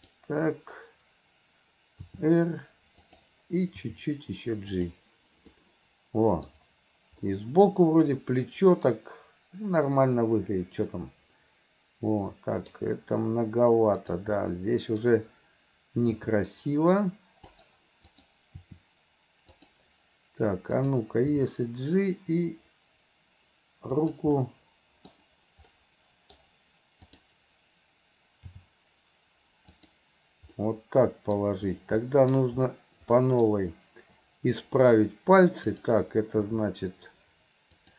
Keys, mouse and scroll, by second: 0.1 click, 2.1 r, 3.9 g, 5.6-6.6 middle drag, 7.3-12.8 middle drag, 14.0 click, 14.4-15.0 middle drag, 16.1 r, 18.1 click, 18.6 r, 20.8 click, 21.3 g, 24.4 scroll up 1, 24.5-25.1 middle drag, 25.8 scroll up 1, 25.8-26.4 middle drag, 26.4 scroll down 1, 27.1 click, 28.5 g, 30.6-31.4 middle drag, 32.0-32.3 middle drag, 33.2 middle click, 35.7 click, 36.4 r.